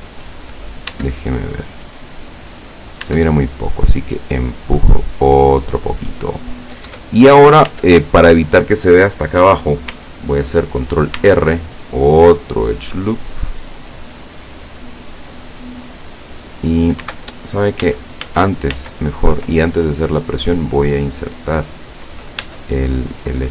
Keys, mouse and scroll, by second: 1.0 Tab, 1.8-3.0 middle drag, 3.2 Tab, 4.4-6.0 drag, 6.1 middle click, 7.0 Tab, 7.8 Tab, 11.3 ctrl+r, 11.9 click, 14.2 click, 14.6-17.1 middle drag, 17.9 ctrl+z, 19.6-21.3 ctrl+drag, 22.5 Tab.